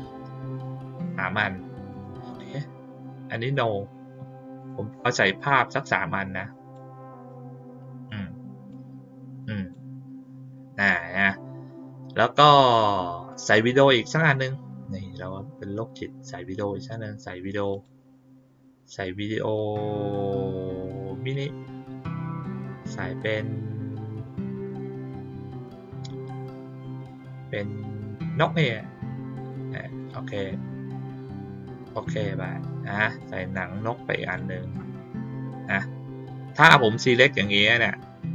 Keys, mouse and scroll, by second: 0.5 ctrl+click, 0.9 ctrl+click, 1.8 click, 3.5 click, 4.5 click, 5.3-6.7 drag, 7.2 click, 8.6-9.7 drag, 11.1 click, 13.2 click, 17.7 click, 21.3 click, 22.8 middle click, 22.8 scroll down 1, 28.3 click, 29.9 click, 31.9 click, 33.1-34.3 drag.